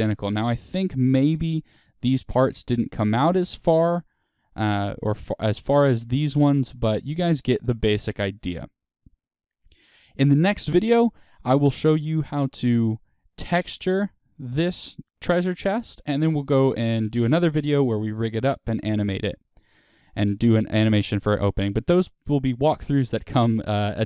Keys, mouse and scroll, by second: 0.0 click, 0.3-4.0 middle drag, 0.7 Tab, 4.0 Tab, 4.6 click, 4.8-7.7 middle drag, 7.8-24.0 middle drag.